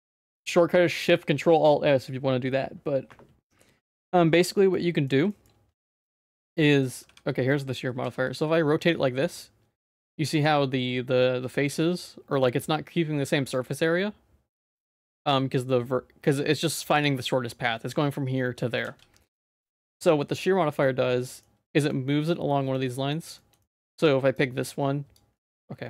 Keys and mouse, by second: 4.0 middle click, 4.7 middle click, 5.3 shift+middle click, 6.0 ctrl+z, 7.0 w, 7.5 middle click, 7.9 r, 18.8 ctrl+z, 19.5 ctrl+s, 20.8 middle click, 21.7 shift+middle click, 22.3 middle click, 22.9 middle click, 23.3 shift+middle click, 23.6 middle click, 24.3 click, 25.4 ctrl+z.